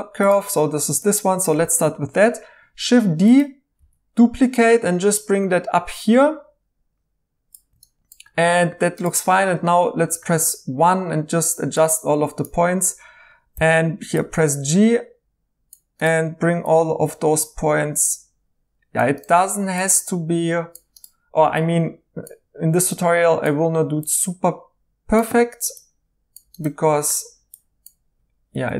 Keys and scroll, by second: 3.8 d, 9.6 1, 13.5 g, 28.5 g.